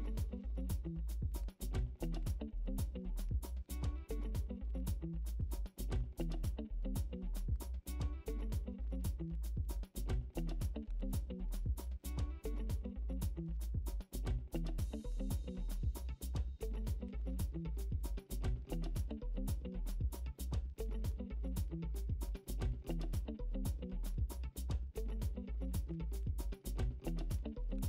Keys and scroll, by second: 9.6 ctrl+i.